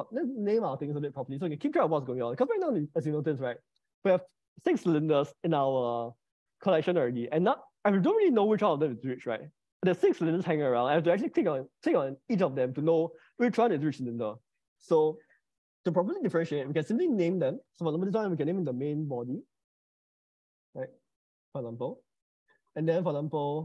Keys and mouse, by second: 11.6 click, 15.8 click, 17.2-20.3 drag.